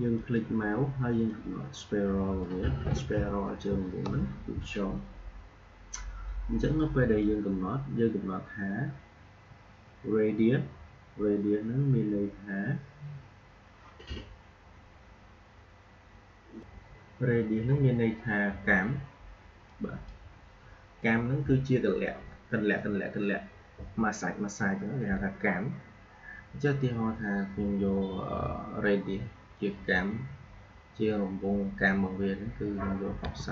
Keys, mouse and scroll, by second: 0.1 click, 0.5-4.7 drag, 6.7-9.6 drag, 16.5 click, 19.6-22.5 drag.